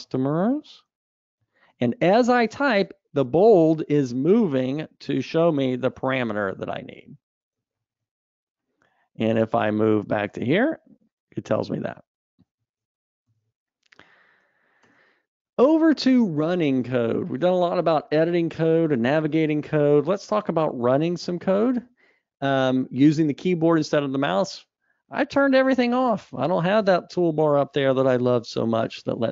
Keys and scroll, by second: 12.3 Escape, 14.0 super+Up.